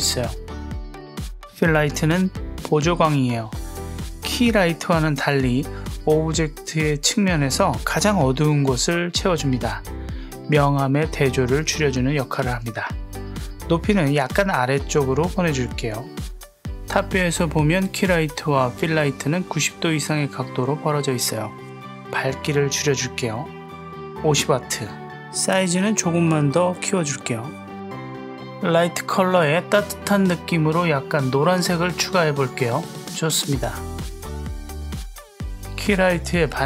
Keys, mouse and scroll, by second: 0.9 click, 4.4 click, 10.2 click, 12.3 click, 12.7 g, 14.4 click, 16.5 drag, 21.7-22.7 drag, 24.7-26.0 drag, 26.5 click, 27.9 click, 35.3 click, 35.4 click, 36.4 click.